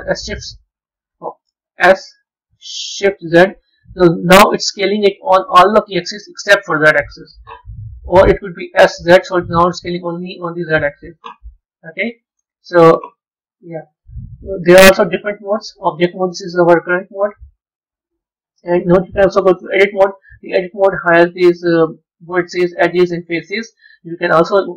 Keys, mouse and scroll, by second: 1.7 s, 8.0 ctrl+z, 8.7 s, 11.7-14.9 middle drag, 16.5-18.1 middle drag, 18.1-19.5 drag, 20.4-21.7 middle drag, 21.7 click, 22.3 scroll up 4, 23.7-24.7 middle drag.